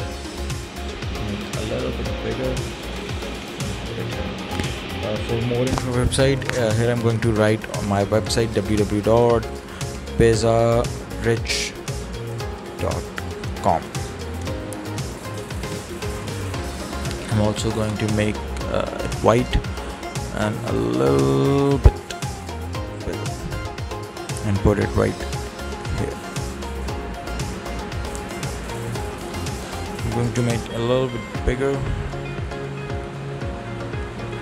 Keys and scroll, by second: 6.5 w, 8.4-9.8 typing, 11.1-14.3 typing.